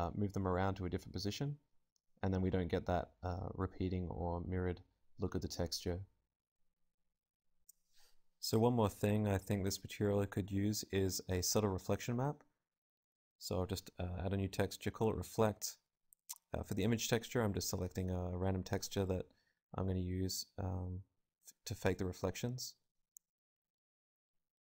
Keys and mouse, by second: 1.0 right click, 1.7 alt+z, 2.5-11.4 drag, 19.6-21.4 drag, 22.7 click.